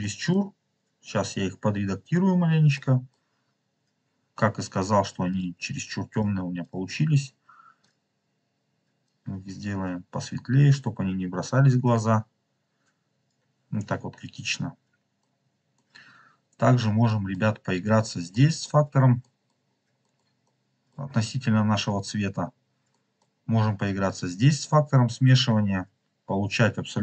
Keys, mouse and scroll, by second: 0.0 middle click, 0.3 scroll up 2, 2.6 middle click, 4.1 scroll up 1, 5.2 click, 6.0 click, 6.1 click, 6.5 click, 7.7 click, 13.6 scroll down 2, 14.2 scroll down 1, 14.3-14.7 scroll up 3, 15.1-15.7 middle drag, 16.1-16.4 scroll down 1, 17.0 middle click, 17.5-17.9 scroll down 2, 18.3 middle click, 19.1 middle click, 19.6-20.1 scroll down 3, 20.0 middle click, 20.4 middle click, 21.2-22.7 scroll up 8, 22.8 middle click, 23.3-24.0 scroll up 2, 24.1-27.0 drag.